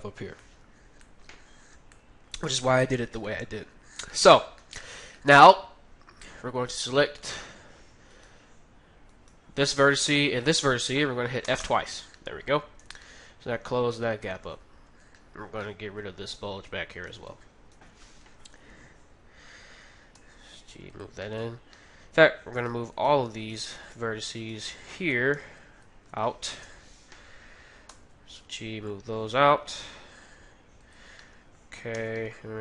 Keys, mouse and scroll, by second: 6.7-12.1 right drag, 11.4 f, 11.6 f, 12.1-14.9 middle drag, 12.8 Tab, 14.9 Tab, 15.2-17.3 middle drag, 16.9-18.9 right drag, 17.5 middle click, 17.7 KP_3, 20.2 g, 21.2-23.3 middle drag, 22.6-26.3 right drag, 25.3 b, 26.6 KP_3, 27.8 g, 31.2-32.6 middle drag, 31.9 a, 32.3 b.